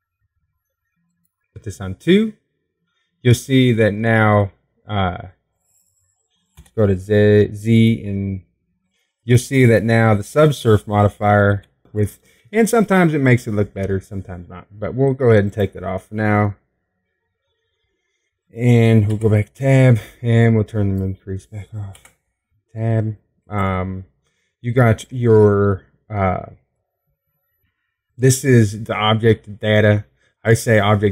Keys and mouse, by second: 3.6-5.3 drag, 8.9 z, 18.0-19.6 drag, 21.5 Tab, 24.4 Tab.